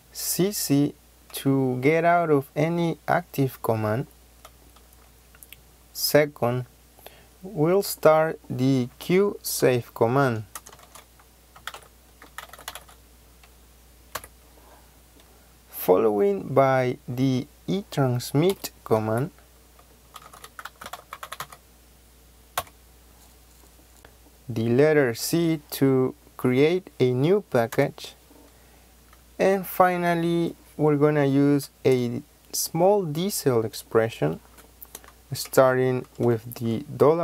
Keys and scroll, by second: 8.8 q, 10.1-14.1 typing, 11.4 Caps_Lock, 18.4 KP_Subtract, 18.9-21.8 typing, 23.9 c, 23.9 BackSpace, 25.0 c, 27.6 ;.